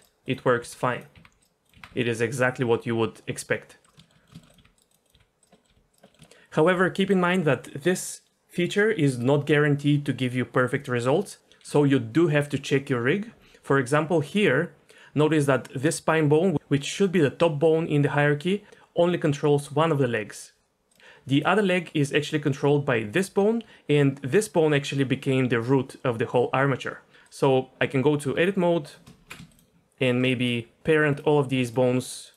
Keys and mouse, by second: 0.3 click, 0.6 r, 1.1 r, 1.6 click, 1.7 r, 4.0 shift+middle click, 4.2 middle click, 4.4 shift+middle click, 4.5 click, 4.6 r, 4.9 click, 5.1 r, 5.5 middle click, 5.7 r, 6.0 middle drag, 21.3 click, 23.3 r, 28.2 Tab, 29.5 shift+click, 30.0 click, 30.4 shift+click, 30.8 shift+click, 31.1 shift+click, 32.2 shift+click.